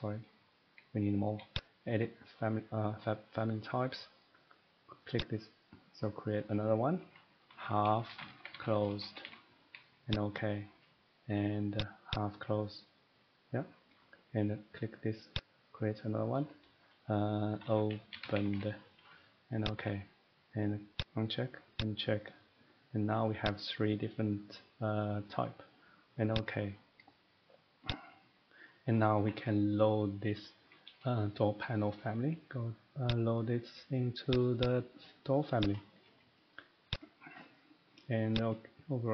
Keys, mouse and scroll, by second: 3.0 click, 5.2 click, 7.5 click, 7.5-9.2 typing, 15.4 click, 17.6-18.5 typing, 19.6 click, 21.0 click, 21.8 click, 23.5 click, 26.3 click, 27.9 click, 28.7 middle click, 28.9 middle click, 29.2 Escape, 29.4 Escape, 30.5 scroll down 3, 30.8 middle click, 33.1 click, 34.3 click, 34.6 click, 35.7 click, 36.9 click, 38.3 click.